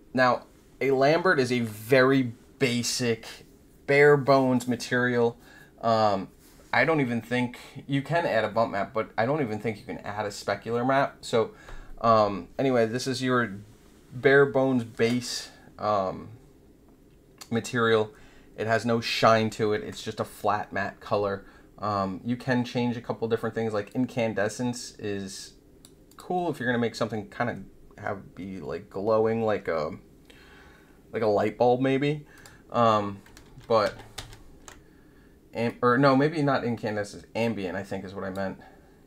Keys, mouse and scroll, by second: 23.8-25.8 drag, 26.0 click, 32.3 click, 33.4 ctrl+z, 33.8 ctrl+z, 34.1 ctrl+z, 35.6-38.3 drag.